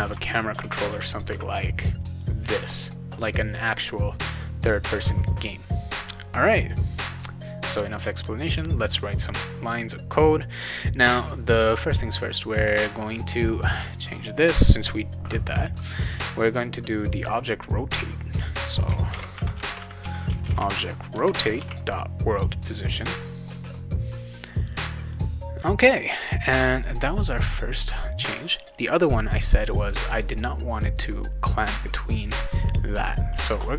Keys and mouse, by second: 0.0-1.8 typing, 7.7 click, 12.7 click, 13.0 click, 18.8-21.0 typing, 21.5 ctrl+s, 28.9-30.2 drag.